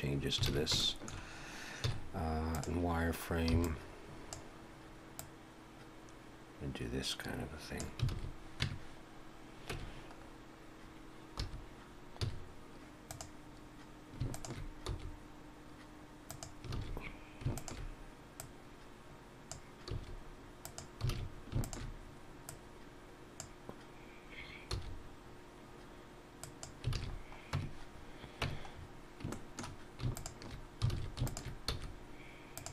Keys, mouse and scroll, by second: 0.4 scroll up 2, 0.4 alt+a, 0.8 shift+middle click, 1.8 z, 3.5 b, 5.2 click, 8.1 alt+a, 8.6 Tab, 9.7 Tab, 10.2-11.1 scroll up 2, 11.4 2, 12.2 z, 14.3 alt+shift+click, 14.8 s, 16.7 alt+a, 17.6 alt+shift+click, 18.4 click, 19.9 s, 21.1 alt+a, 21.6 alt+shift+click, 22.5 click, 24.7 s, 26.9 alt+a, 27.0-27.4 scroll down 5, 27.6 Tab, 27.9 scroll down 1, 28.4 Tab, 28.8-29.3 scroll up 3, 29.3 shift+middle click, 30.2 alt+shift+click, 30.9 alt+a, 31.3 alt+shift+click, 31.7 s.